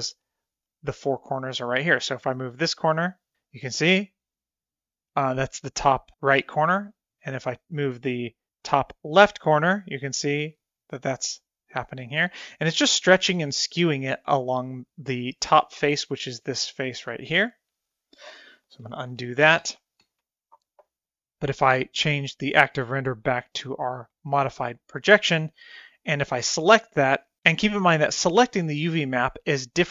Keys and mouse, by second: 2.0-7.2 drag, 8.3-8.7 drag, 9.3-13.1 drag, 19.5 ctrl+z, 19.9 ctrl+z, 20.3 ctrl+z, 20.8 ctrl+z, 24.0 click, 26.5 click, 28.8 click, 29.5 click.